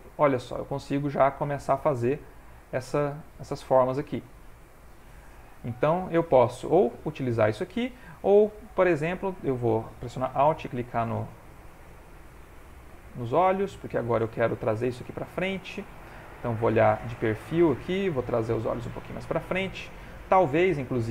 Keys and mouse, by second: 4.2 click, 8.1 middle click, 8.2 ctrl+middle click, 10.6 alt+click, 13.2 middle click, 14.4 middle click, 14.9 ctrl+middle click, 15.2 ctrl+middle click, 16.6 click, 17.3 shift+middle click, 17.7 ctrl+middle click, 18.3 g, 19.1 click.